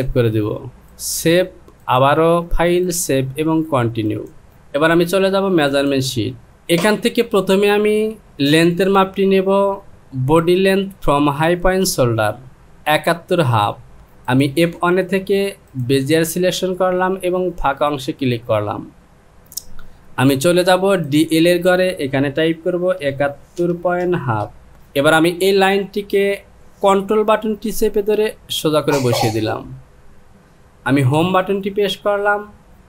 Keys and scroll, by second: 23.0 KP_7, 23.6 KP_1, 24.0 KP_Decimal, 24.8 KP_5, 31.1 Home.